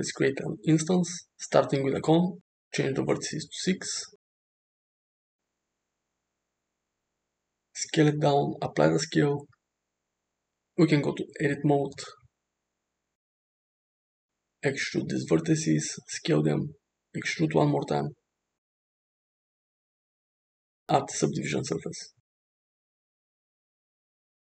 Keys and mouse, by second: 1.8 click, 2.9-4.6 drag, 5.6 s, 8.5 ctrl+a, 10.9 shift+middle click, 11.2 Tab, 12.2 alt+z, 12.9 click, 14.2 e, 15.8 s, 18.1 e, 19.7 Tab, 21.7-22.9 drag, 24.3 click.